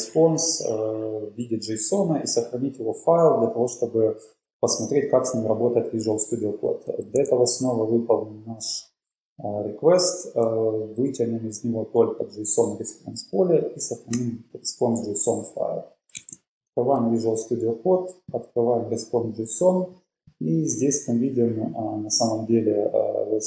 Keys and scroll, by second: 7.1 typing, 10.7 BackSpace, 12.7 Tab, 14.3 Return, 16.3 super+Tab.